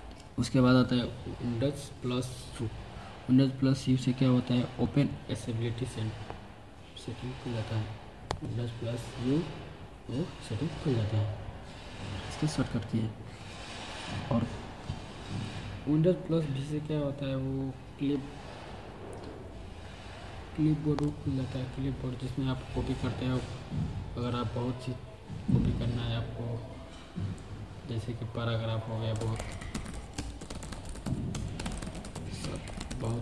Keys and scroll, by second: 8.1 super+u, 20.7 super+v, 28.8-33.2 typing.